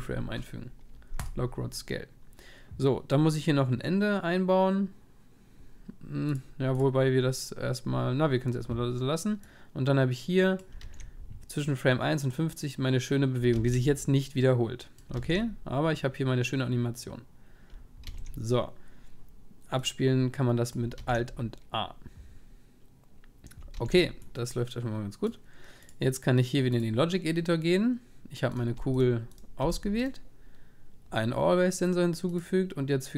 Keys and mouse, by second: 10.6 click, 10.8-25.8 alt+a, 26.5 click, 27.3-28.5 drag, 30.1 g.